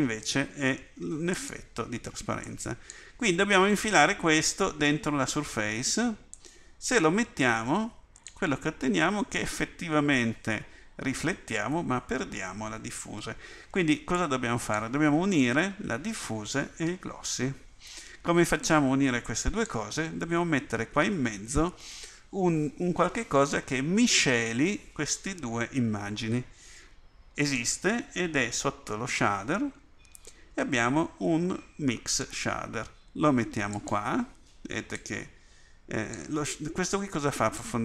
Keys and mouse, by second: 2.5-6.3 drag, 35.1-36.2 drag, 37.7 click.